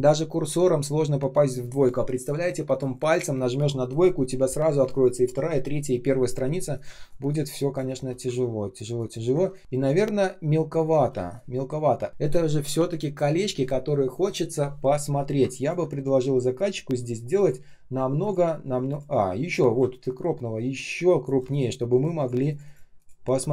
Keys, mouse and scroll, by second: 6.8 space, 7.3 space, 7.3 space, 8.5 ctrl+scroll down 1, 8.9 ctrl+click, 9.4 shift+0, 9.6 space, 11.0 space, 11.6 space, 15.5 ctrl+click.